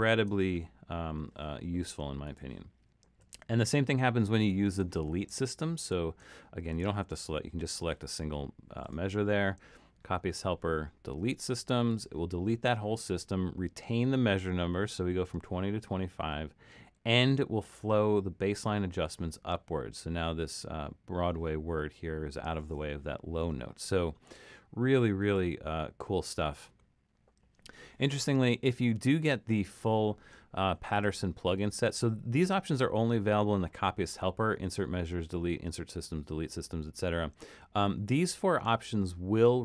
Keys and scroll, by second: 3.2 super+z, 25.2 super+z.